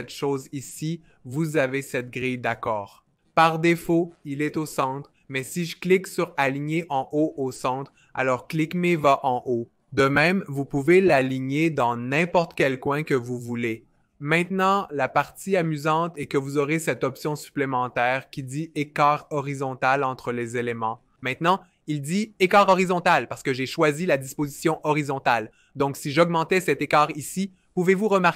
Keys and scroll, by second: 26.9 shift+Up, 27.2 shift+Up, 27.3 shift+Up.